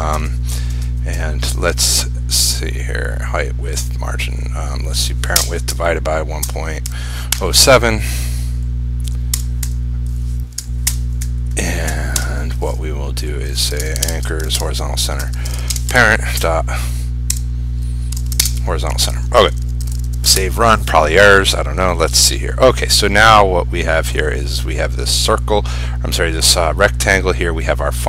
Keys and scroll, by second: 14.2 ctrl+space, 18.5 ctrl+space, 19.8 ctrl+a, 20.0 ctrl+shift+s, 20.4 ctrl+r.